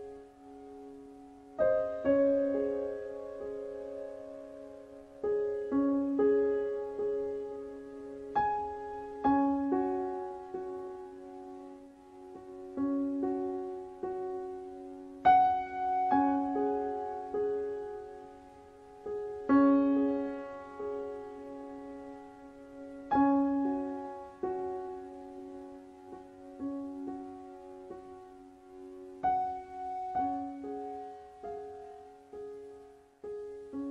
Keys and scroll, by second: 5.1 KP_4, 16.1 KP_5.